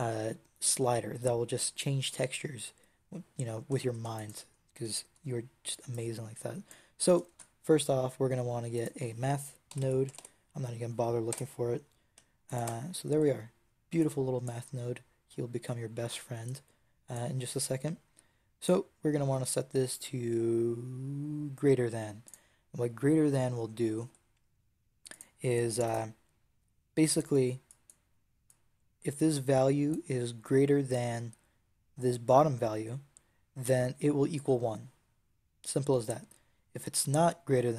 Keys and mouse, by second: 7.2 shift+a, 13.9-20.5 drag, 25.0-33.2 drag.